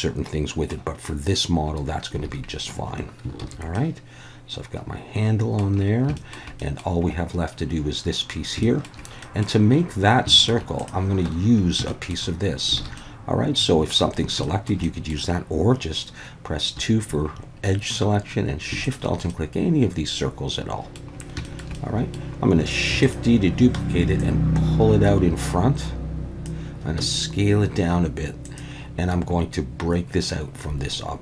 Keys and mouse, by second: 2.3 alt+a, 3.4 ctrl+s, 3.7-5.6 middle drag, 6.2 shift+middle drag, 6.6 middle click, 8.6 shift+middle drag, 9.2 middle click, 10.3 shift+middle drag, 10.8-11.3 drag, 11.3 Tab, 11.9 shift+middle click, 12.8 alt+a, 13.0-14.0 middle drag, 14.4 shift+middle click, 14.8 middle click, 16.8 2, 19.3-20.9 middle drag, 21.4 shift+middle click, 21.7 middle click, 22.9 shift+d, 23.0 click, 24.3-26.4 drag, 27.0 s, 28.4 click.